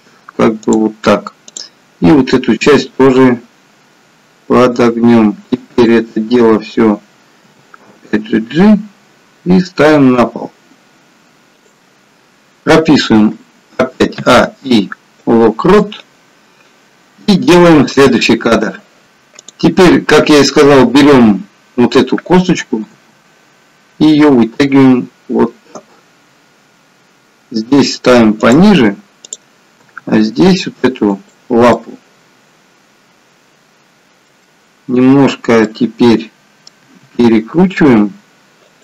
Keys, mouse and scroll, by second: 1.5 click, 2.8 r, 5.7 click, 7.4 g, 13.3-14.3 a, 14.3 i, 19.4 click, 23.2 g, 29.2 click, 30.0 g, 31.8 middle click, 35.6 middle click, 37.0 r.